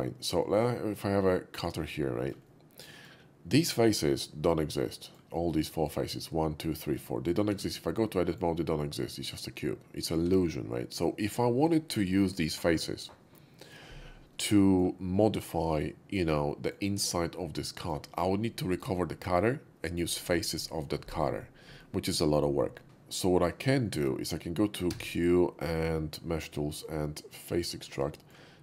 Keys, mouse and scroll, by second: 1.6 click, 2.0 middle click, 2.2 shift+middle click, 2.5-3.0 shift+middle drag, 4.2-5.1 shift+middle drag, 5.6 middle drag, 7.0-7.3 middle drag, 7.5 Tab, 8.0 Tab, 8.0 middle click, 10.8 middle click, 12.6 Tab, 14.2-14.8 middle drag, 15.5-16.7 middle drag, 17.6 middle drag, 23.8 shift+middle drag, 24.8 q, 27.5 click, 28.1 shift+middle drag.